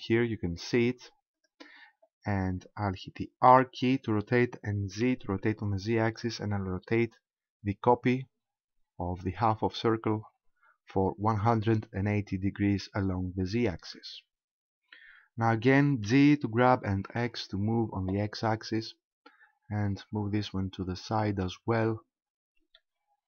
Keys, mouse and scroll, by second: 1.5 right click, 3.6 r, 13.9 ctrl+click, 16.1 g, 21.4 ctrl+click, 22.1-22.8 scroll up 2, 22.8 shift+middle click.